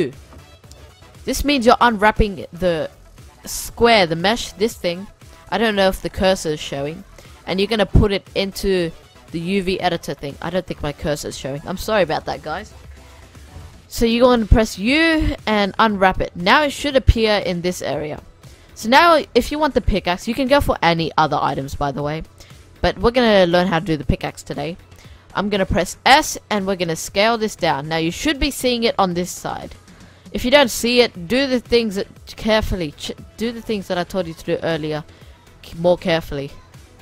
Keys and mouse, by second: 0.6 u, 8.0-9.9 drag, 8.5-9.7 middle drag, 13.3 u, 16.9-21.3 middle drag, 23.8-25.4 middle drag, 25.4 s, 28.5-33.1 middle drag, 31.7 g, 32.5 s, 33.6 g, 35.1 s, 36.1-36.9 middle drag.